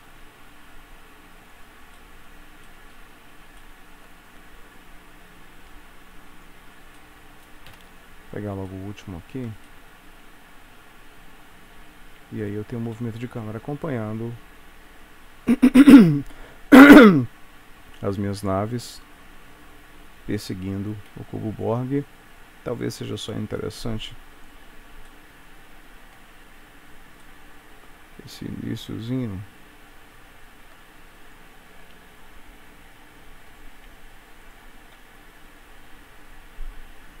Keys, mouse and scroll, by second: 2.1 shift+middle click, 3.5 middle click, 3.7 shift+middle click, 4.9 click, 7.1 shift+middle click, 7.8 shift+Right, 8.8 shift+middle click, 9.7 middle click, 12.5 click, 12.9 space, 21.1 Escape, 23.1 click, 25.1 shift+middle click, 26.6-27.1 scroll up 1, 27.3 shift+middle click, 31.3 click, 32.0 shift+d, 34.5 click, 34.9 space.